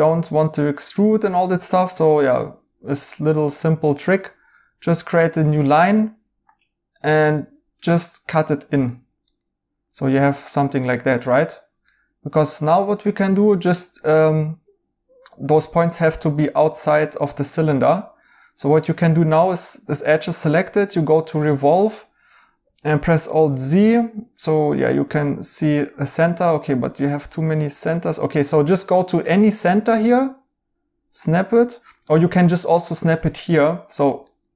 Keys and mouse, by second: 0.1 right click, 9.2 right click, 11.8 right click, 16.8 right click, 21.6 right click, 22.9 alt+z, 23.3 right click, 26.2 right click, 28.1 right click, 31.6 right click, 33.3 right click.